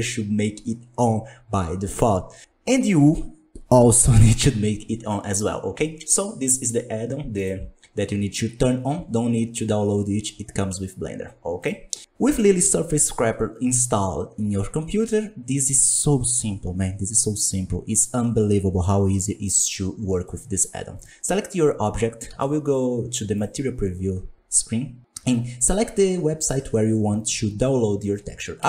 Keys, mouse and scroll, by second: 20.2-20.9 middle drag, 20.9 right click, 22.2 z, 28.5 click.